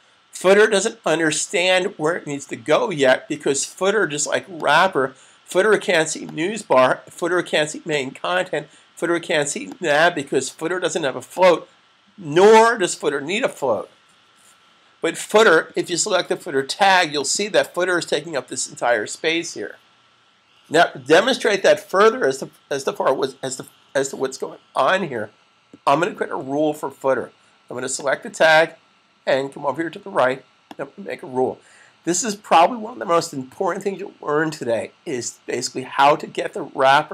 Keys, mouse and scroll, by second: 4.5 click, 16.9 click, 27.8 click, 30.5 click.